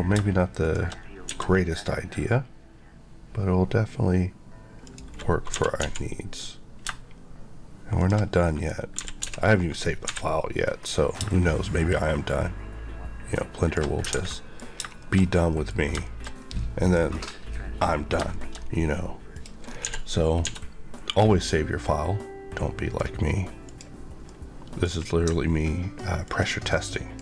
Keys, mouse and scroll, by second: 0.5 shift+click, 1.2 s, 4.8 click, 5.4 typing, 7.9 click, 8.3 middle click, 8.6 scroll up 1, 8.9-9.9 typing, 13.5 click, 13.9 scroll, 13.9 alt+scroll down 1, 14.0 alt+a, 14.2 alt+middle click, 14.7 shift+scroll down 1, 14.9 shift+middle click, 15.2-16.2 scroll down 3, 15.4 middle click, 16.0 middle click, 16.5 middle click, 17.9-19.2 scroll up 3, 18.2 shift+middle click, 19.2 click, 19.6 scroll up 1, 19.7 d, 20.3 d, 21.0 click, 24.2 middle click, 24.8-25.7 scroll up 2, 26.2 ctrl+click.